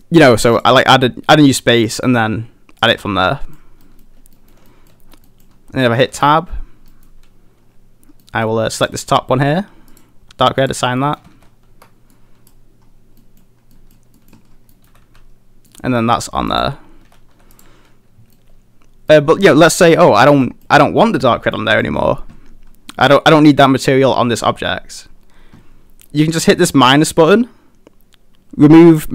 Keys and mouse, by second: 2.0 click, 3.3 middle drag, 3.8 middle click, 4.4 middle drag, 4.7 shift+middle drag, 5.3 middle drag, 5.9 middle drag, 6.1 Tab, 6.9 middle click, 8.2 middle click, 8.8 click, 9.9 click, 11.0 middle click, 11.4 a, 11.8 Tab, 12.1-12.5 middle drag, 13.3 middle drag, 13.8 middle drag, 14.2 middle click, 14.7 middle click, 15.1 a, 15.7 middle click, 17.1 a, 17.3 a, 17.6 click, 18.4-19.1 middle drag, 20.5 middle drag, 21.0 middle click, 21.6 middle click, 23.0 middle click.